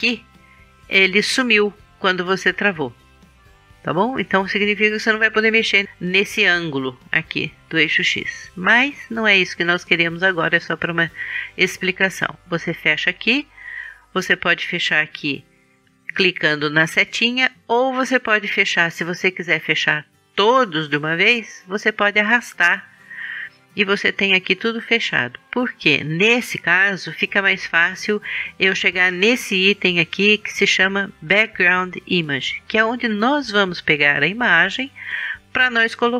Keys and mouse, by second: 3.1-4.9 drag, 9.3-11.2 drag, 12.6-14.4 drag, 14.4-15.8 middle drag, 15.8-18.5 drag, 18.5 middle click, 19.4-21.3 drag, 21.3 middle click, 21.5-23.2 drag, 23.2-25.0 middle drag, 29.0-30.9 drag, 30.9-35.7 middle drag.